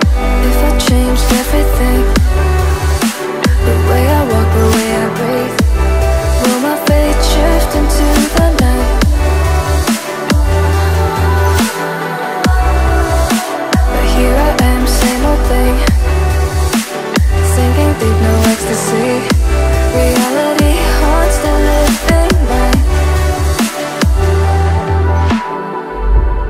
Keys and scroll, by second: 5.8 ctrl+a, 16.8 alt+a.